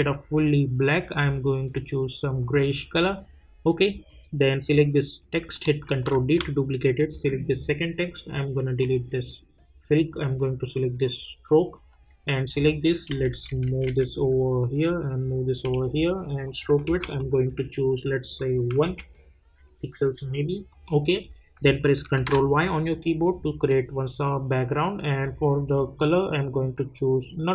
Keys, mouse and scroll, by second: 5.9 ctrl+d, 7.1 click, 12.5 click, 13.1 Down, 14.2 Right, 16.4 click, 20.7 click, 22.1 ctrl+y, 25.2-27.5 drag.